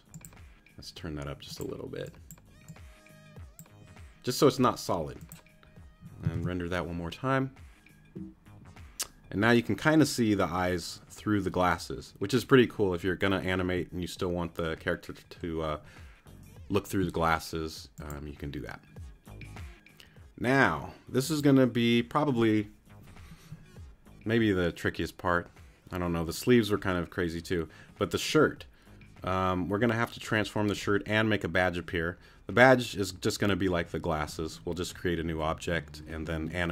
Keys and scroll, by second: 6.3 super+r.